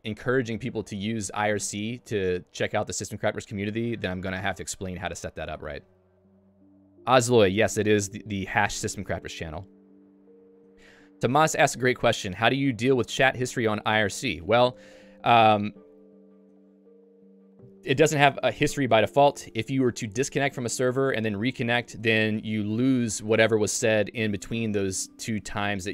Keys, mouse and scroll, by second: 14.4 click.